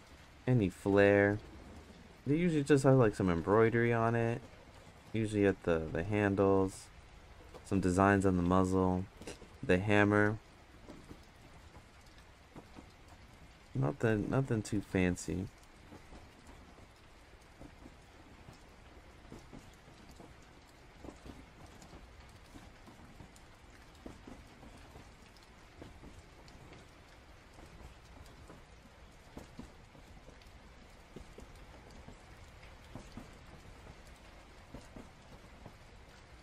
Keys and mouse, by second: 0.5-15.6 drag, 18.5 click, 20.3-21.8 drag, 23.6-25.0 drag, 25.9 click, 26.8 ctrl+z, 27.0 ctrl+z, 28.2 click, 30.0-32.0 drag, 32.4 ctrl+z, 33.0-35.2 drag, 35.9-36.4 drag.